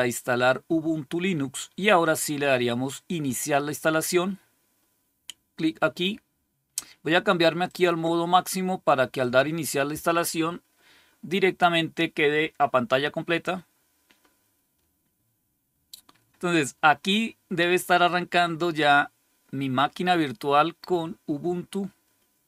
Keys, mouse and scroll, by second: 7.5 click, 9.1 click.